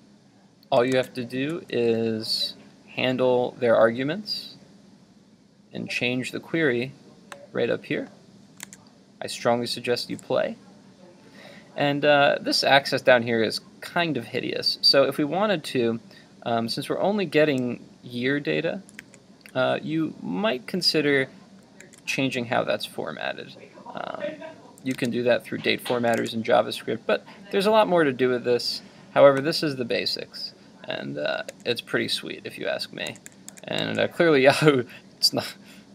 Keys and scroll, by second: 0.9 super+Tab, 8.7 super+Tab, 19.0 super+Tab, 31.5 super+Tab.